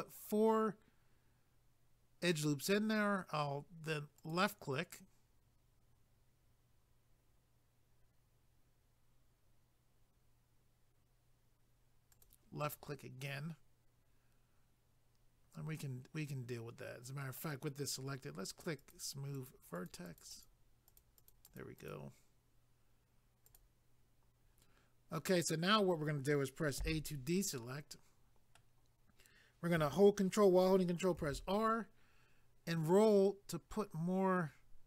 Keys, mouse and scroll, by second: 4.2 click, 12.1 click, 12.7 middle click, 18.8 click, 19.4 click, 19.5 double click, 19.8 click, 20.1 click, 20.2 double click, 20.3 click, 20.9 click, 21.0 double click, 21.2 click, 21.5 click, 21.6 double click, 21.8 click, 23.5 click, 26.8 a, 27.6 middle click, 31.2 ctrl+r, 31.8-32.5 scroll up 2.